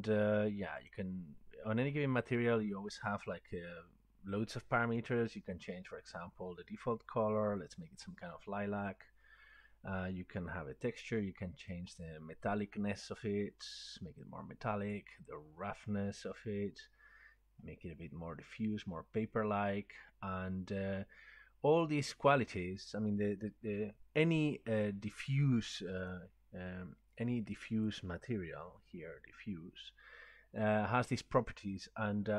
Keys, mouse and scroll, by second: 0.0 scroll down 1, 0.9 click, 2.2 scroll, 3.2 click, 5.2 click, 7.8 click, 9.1-10.2 scroll, 14.9 click, 21.8 click, 26.2 click, 28.0 click.